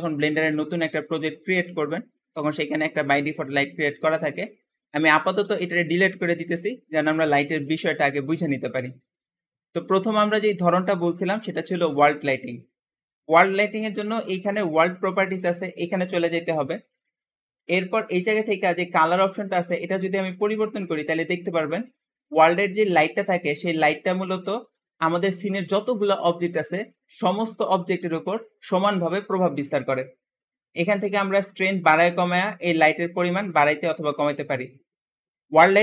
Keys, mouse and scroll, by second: 4.3 middle click, 5.3 x, 5.3 x, 9.7-11.0 middle drag, 11.0-11.4 scroll up 1, 14.3 click, 19.4 click, 19.5 Return, 22.2 Return, 23.0 click, 31.3-34.4 drag.